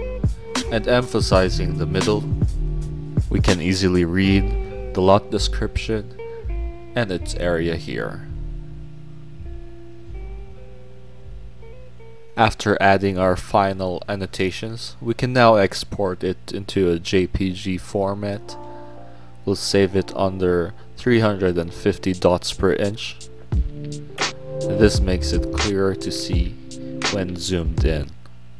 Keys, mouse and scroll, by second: 0.0-0.9 typing, 1.2 middle click, 1.4 click, 1.9 click, 3.4 click, 4.2-4.6 scroll down 4, 4.9 scroll up 2, 5.1 click, 6.0 scroll up 2, 6.7 click, 9.4 click, 10.0 click, 10.9 middle click, 11.3 scroll down 2, 12.7 click, 14.7 click, 15.3 click, 16.5 click, 18.1 click, 18.7 click, 20.1 click, 20.5 click, 20.8 click, 22.0 click, 24.3 click, 24.7 click, 26.1 middle click, 26.1 scroll down 2, 26.2 scroll up 2, 26.6 click, 26.9 middle click, 26.9-27.5 scroll up 2, 27.5 scroll down 2.